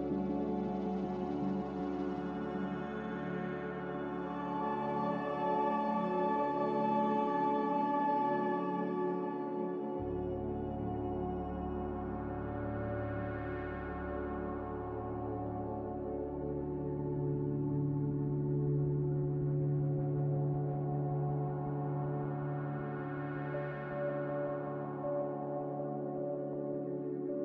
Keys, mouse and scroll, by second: 10.8 x, 12.0-13.9 typing, 15.8 Escape, 16.1 Escape, 16.1 b, 18.2 Delete, 18.9 Delete, 20.3 m.